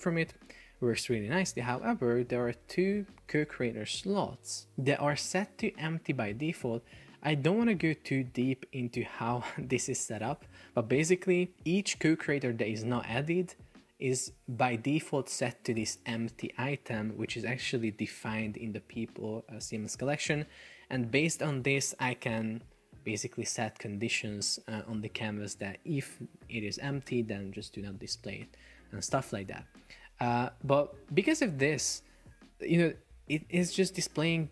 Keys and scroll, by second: 30.0 Escape.